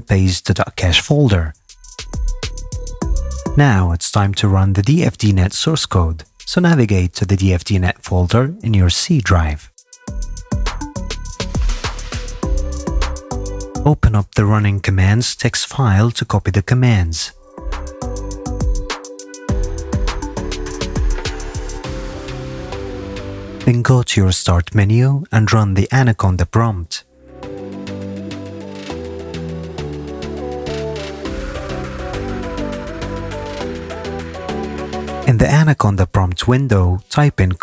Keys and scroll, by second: 9.9 d, 36.8-37.6 typing.